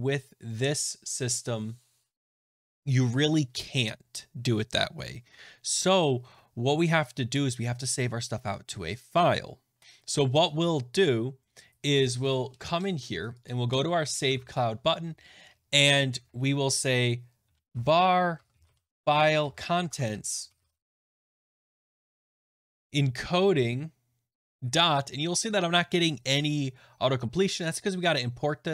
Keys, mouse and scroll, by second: 9.8 click, 9.8-10.2 scroll, 11.4 scroll, 13.4 click, 14.3 Tab, 17.3-25.0 typing, 22.0 shift+click, 24.3 shift+click, 27.5 right click.